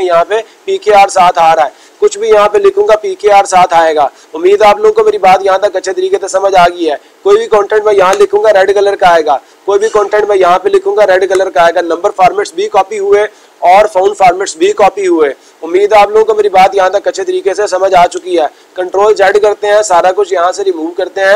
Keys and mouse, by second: 1.2 click, 2.3 click, 6.0-7.4 drag, 9.8-11.4 drag.